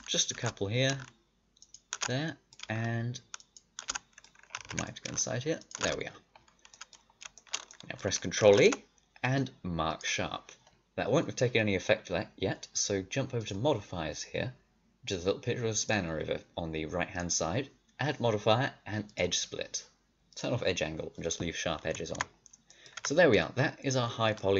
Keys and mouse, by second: 4.5 ctrl+z, 8.4 ctrl+e, 13.3-19.1 drag, 19.6 middle click, 20.2-22.1 drag, 22.1 Tab, 22.2 click, 22.9 a.